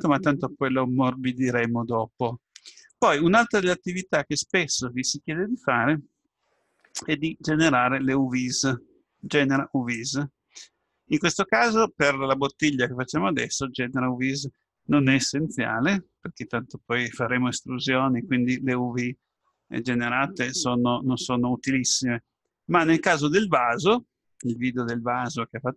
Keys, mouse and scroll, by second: 3.9-5.5 drag, 10.0-11.8 drag, 21.2 click.